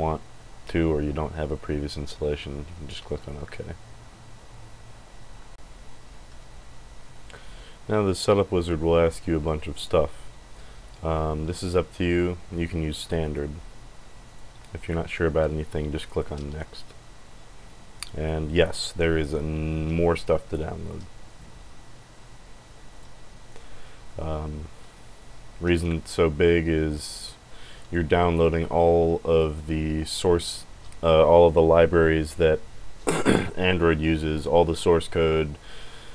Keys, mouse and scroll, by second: 13.2 click, 14.2 click, 15.9 click, 18.1 click, 18.6 click, 21.3 click, 22.9 click.